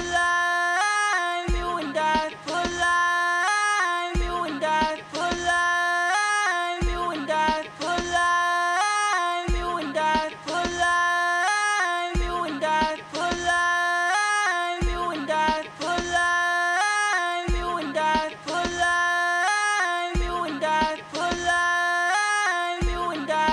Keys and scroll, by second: 18.9-19.9 typing.